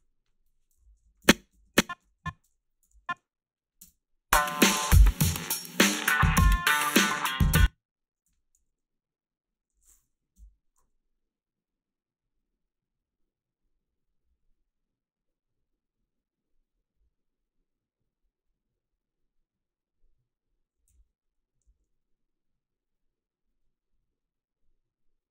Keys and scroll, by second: 0.8 i, 1.1 Down, 1.2 Left, 1.6 Down, 2.0 Left, 2.2-3.8 typing, 7.4 space, 8.3 h, 8.6 a, 10.4 Delete, 20.9 h, 21.7 a.